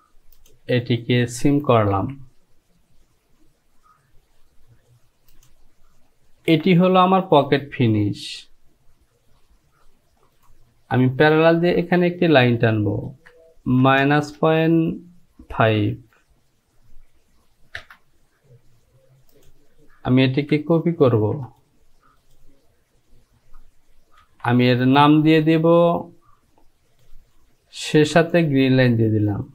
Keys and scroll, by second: 2.1 j, 6.6 Home, 13.2 Down, 13.9 KP_Subtract, 14.4 KP_Decimal, 15.6 KP_5, 17.9 Return, 21.2 ctrl+c, 24.4 e.